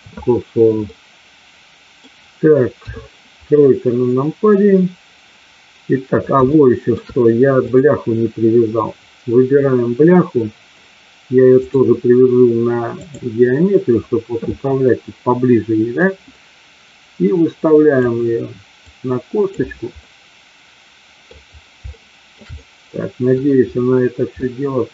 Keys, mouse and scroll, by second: 0.8-2.0 middle drag, 2.8 KP_3, 6.5-6.9 shift+middle drag, 11.7-13.2 drag, 16.0-17.9 drag, 18.8 click, 19.9-21.3 middle drag, 21.9-22.3 shift+middle drag, 22.4-23.3 middle drag, 24.4-24.9 middle drag.